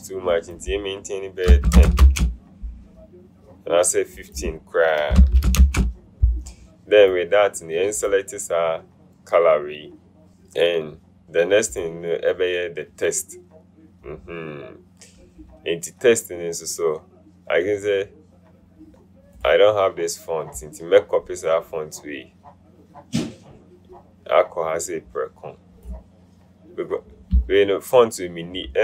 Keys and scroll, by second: 1.7 KP_1, 1.9 KP_0, 2.1 Return, 5.4 KP_1, 5.6 KP_5, 5.8 Return.